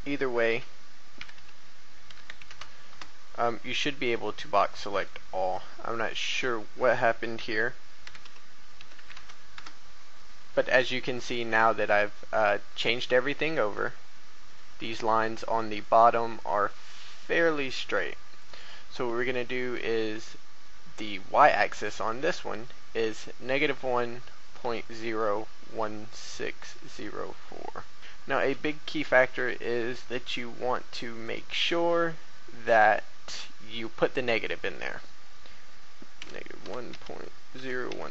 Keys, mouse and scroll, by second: 0.4-2.5 typing, 4.9 right click, 6.2 click, 7.1 click, 8.0-9.5 typing, 13.3 scroll up 1, 13.8 shift+scroll, 14.9 shift+a, 15.8 shift+middle click, 16.7-17.3 scroll down 1, 18.4 right click, 26.1 shift+middle click, 27.9 KP_4, 28.5 a, 31.2 right click, 34.3 click, 36.6-38.1 typing.